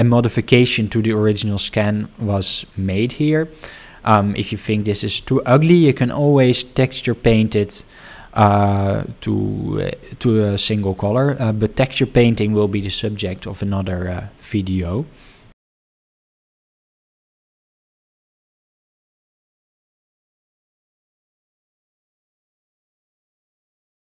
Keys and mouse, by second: 0.2-0.5 shift+middle drag, 1.0-4.6 middle drag, 4.8 shift+middle drag, 16.8 shift+middle click.